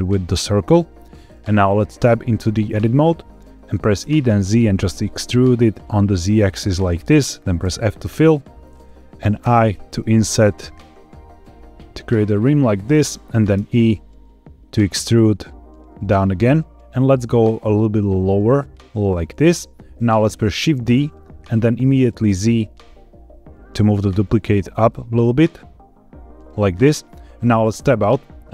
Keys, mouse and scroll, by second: 2.0 Tab, 2.6 scroll down 1, 2.7-4.0 scroll up 3, 4.0 e, 4.2 z, 6.9 click, 7.5 f, 9.3 i, 12.8 click, 13.5 e, 19.3 click, 20.9 shift+d, 22.2 z, 26.5 click, 27.6 Tab.